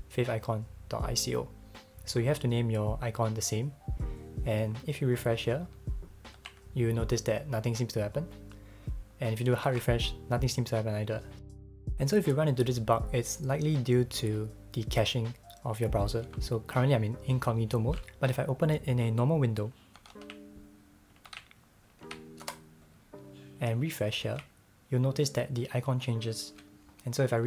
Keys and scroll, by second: 6.4 super+r, 9.7 shift+super+r, 19.9 super+l, 20.1 super+c, 21.3 super+n, 22.0 super+v, 22.4 Return, 24.2 super+r.